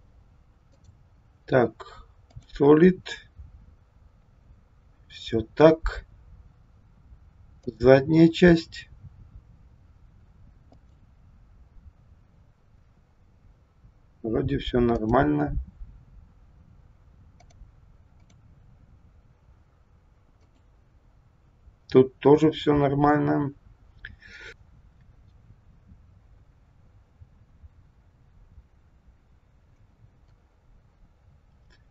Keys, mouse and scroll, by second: 0.6 click, 2.4 click, 7.7 click, 10.9 click, 14.8 click, 17.4 click, 18.1 click, 20.3 click.